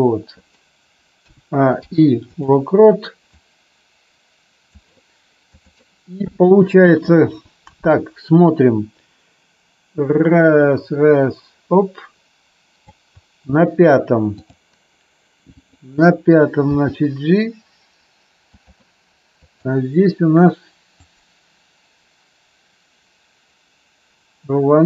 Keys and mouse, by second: 1.2 a, 1.7 i, 3.3-4.7 drag, 7.9-12.8 drag, 15.5 click, 16.6 g, 18.5 click, 19.5 click, 20.9 click.